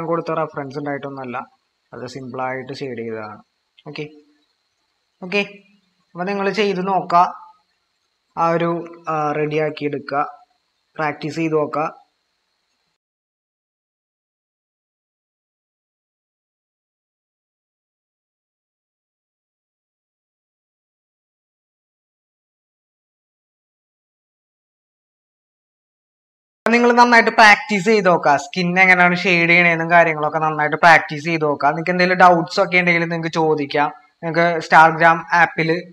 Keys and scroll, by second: 5.5 ctrl+-, 6.0 ctrl+-, 8.7-9.6 typing, 14.9-15.5 typing, 21.5 ctrl+=, 21.6 ctrl+-, 25.0 ctrl+-.